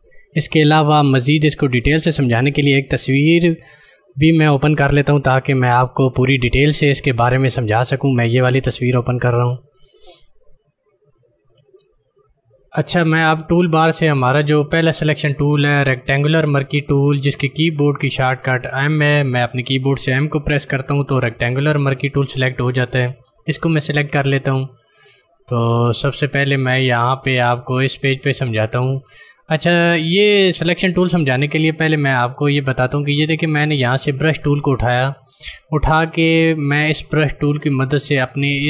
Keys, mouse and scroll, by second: 0.7 click, 8.0 click, 21.1 m, 24.8 click, 34.2 click.